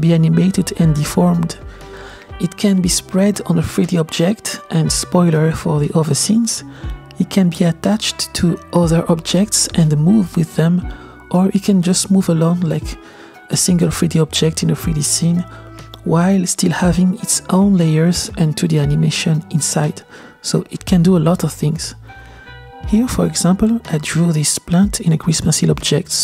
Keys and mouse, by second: 0.1 Tab, 0.5 y, 0.5 g, 1.7 Tab, 1.7-4.8 middle drag, 8.5 space, 8.6 click, 9.0 g, 9.7 g, 10.4 r, 11.4 click, 11.6 Escape, 12.0 ctrl+z, 12.2 space, 12.8 space, 14.6 space, 14.8 g, 15.8 click, 16.2 g, 16.6 space, 17.0 space, 17.1-17.6 drag, 17.9 click, 18.1 click, 18.2 click, 18.5 click, 18.7 click, 18.9-19.9 drag, 20.5 click, 20.7-23.0 drag, 23.4-23.7 drag, 25.1 drag, 25.4 space.